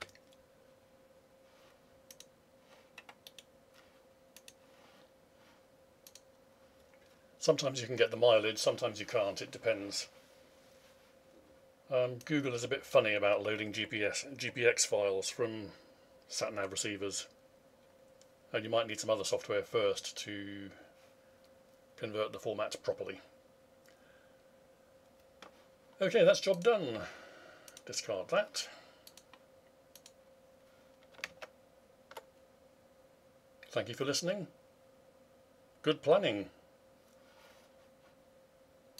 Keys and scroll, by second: 31.3 alt+Tab.